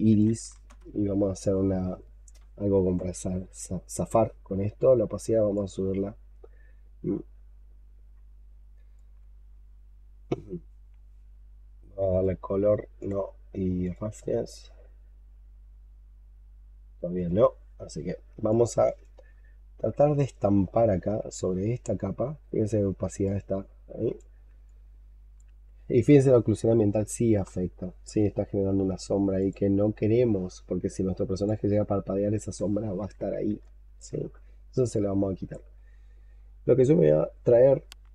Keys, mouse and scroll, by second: 0.0-0.9 typing, 3.7-4.0 scroll down 3, 17.7-18.2 scroll down 4, 18.3 scroll down 1, 18.4 alt+click, 19.2-19.9 alt+scroll up 7, 20.1 alt+middle click, 20.8 alt+middle click, 24.5 alt+click, 33.5 alt+click, 34.2 alt+scroll up 1, 34.8 alt+click.